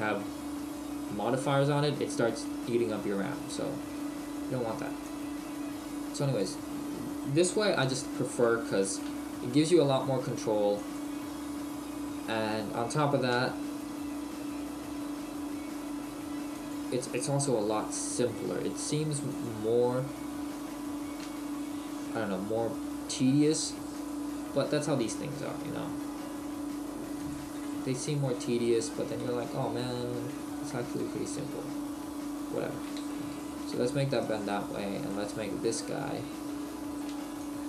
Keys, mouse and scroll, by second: 3.3 middle click, 3.9-4.4 scroll up 1, 4.8 scroll up 3, 5.0 click, 7.1-7.9 scroll up 1, 7.9 KP_3, 9.0 r, 10.9 click, 11.6 shift+middle click, 12.3-12.9 scroll down 1, 12.9 scroll down 1, 13.4 g, 16.7 click, 17.6 r, 19.5 click, 24.0 click, 25.5 r, 27.3 click, 27.6 middle click, 29.3 middle click, 30.6 Tab, 31.2 middle click, 34.2 right click, 34.6 Tab, 35.1 middle click.